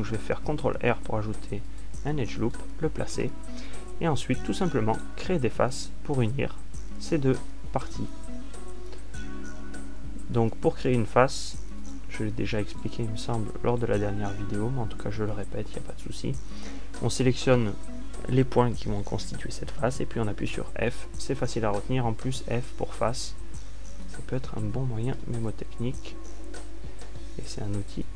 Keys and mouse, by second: 2.0 ctrl+r, 4.2-5.3 drag, 10.0 f, 11.2 a, 19.6-21.9 right drag, 22.0 f, 24.8 click, 26.1 Escape.